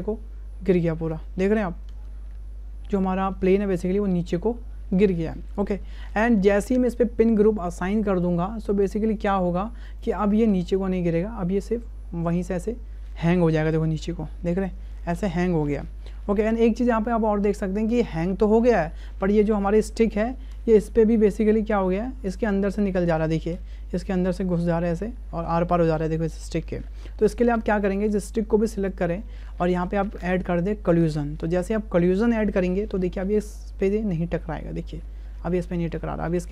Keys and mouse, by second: 0.6 space, 1.5 click, 1.9 space, 4.9 click, 6.0 shift+click, 9.2 click, 10.9 space, 20.8 space, 20.9 click, 27.0 space, 27.9 click, 28.9 click, 30.9 click, 33.0 space.